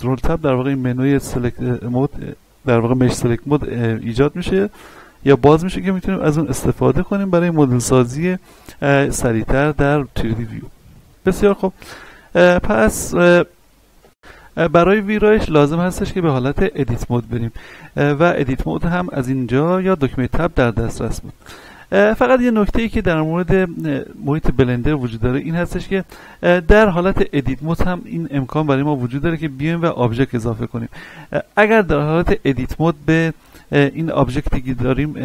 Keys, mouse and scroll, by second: 3.8-12.2 drag, 12.2-14.0 middle drag, 14.0 ctrl+F10, 16.2-20.7 middle drag, 20.7-21.4 scroll up 1, 22.9-24.8 scroll down 1, 26.9 Tab, 27.6 a, 28.4-35.2 middle drag.